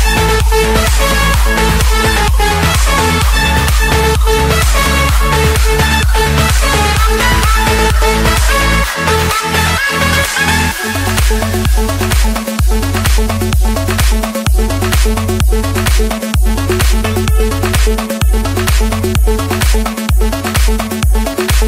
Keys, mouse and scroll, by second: 0.4 click, 1.1 click, 1.4 Return, 3.5 Escape, 6.2-8.2 typing, 8.7 Return, 12.5 click, 13.5 click, 16.9-18.0 drag, 21.2-21.6 drag.